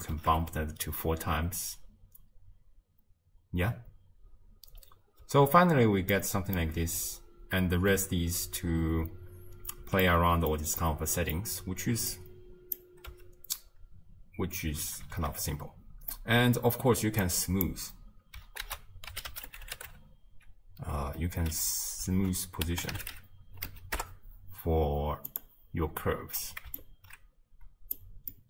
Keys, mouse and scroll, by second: 0.2 shift+space, 5.3 space, 6.2-6.7 middle drag, 6.7 space, 9.8 space, 10.1-12.2 middle drag, 12.2 click, 13.1 space, 14.6 space, 15.2 shift+space, 17.3-24.0 drag, 26.8 alt+click.